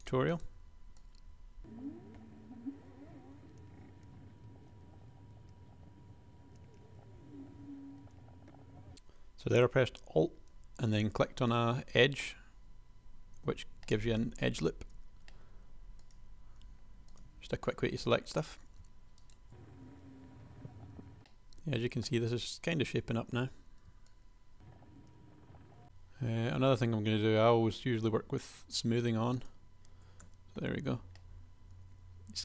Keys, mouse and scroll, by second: 3.0 click, 3.6 click, 4.2-7.6 typing, 4.6 click, 8.2 super+a, 13.7 s, 15.0 g, 16.8 g, 19.5-21.2 typing, 21.8 shift+click, 22.0 Tab, 23.2 Tab, 23.6 shift+super+a, 24.7 r, 25.0 g, 25.5 r, 25.8 Tab, 30.5 Tab.